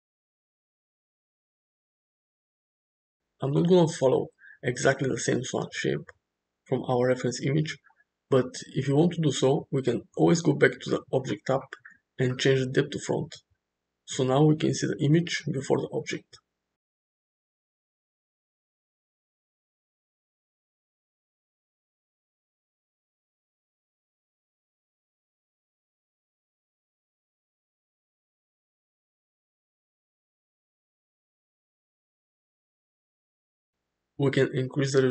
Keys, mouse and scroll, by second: 0.4 Tab, 2.0-2.6 middle drag, 3.0 shift+middle drag, 3.3 middle click, 4.0 click, 4.7-5.9 middle drag, 8.1 click, 12.4 click, 14.2 click, 15.0 Tab, 15.5-15.9 drag, 16.1 g, 18.8 shift+middle click, 19.5 g, 20.4 click, 20.7 g, 22.3 Tab, 23.4 ctrl+z, 23.7 ctrl+z, 24.0 ctrl+z, 24.6 ctrl+z, 25.1 Tab, 25.4 click, 27.3 click, 28.2 h, 30.1-33.2 shift+drag, 33.6 click, 34.2-34.9 middle drag.